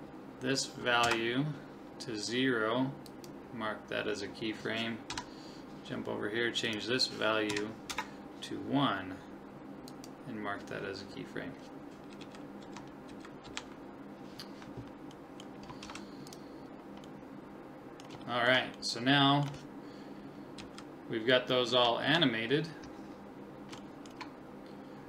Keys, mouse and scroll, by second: 3.1 click, 5.1 Left, 6.7 click, 9.9-11.7 drag, 11.3-13.3 middle drag, 12.2 Right, 12.6 Left, 13.1 Right, 13.5 Left, 15.2 middle click, 15.8 ctrl+s, 17.1 middle click, 17.3-20.6 middle drag, 20.6 Right, 21.7 Left, 22.0 Left, 23.8-25.0 middle drag.